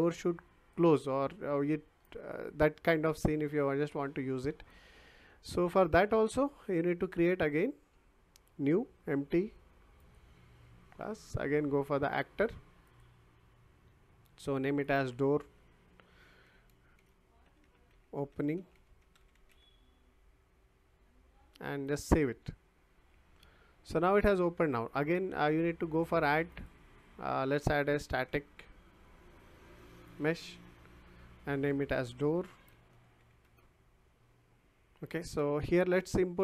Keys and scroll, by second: 16.7-20.0 typing, 27.9-29.3 typing, 32.4-33.7 typing.